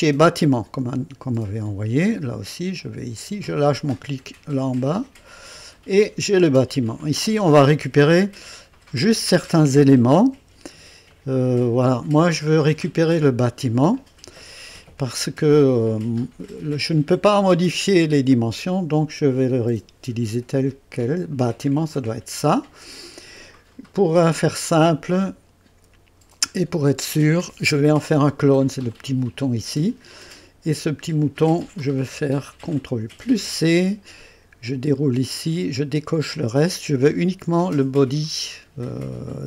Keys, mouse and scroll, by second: 0.2-5.1 drag, 6.7 scroll up 2, 8.2-9.2 right drag, 10.3 KP_1, 11.1-11.8 right drag, 12.0-12.3 scroll up 1, 12.9 scroll down 1, 21.9 click, 25.1 click, 26.4 click, 28.9 click, 33.2 ctrl+c, 35.3 click, 36.2 click.